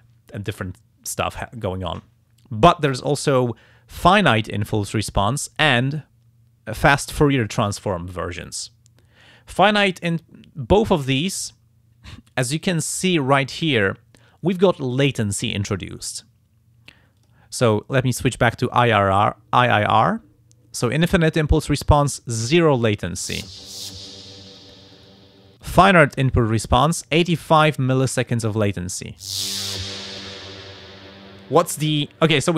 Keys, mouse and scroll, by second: 10.7 click, 17.2 click, 18.7 click, 24.9 click, 25.6 click, 26.8 click.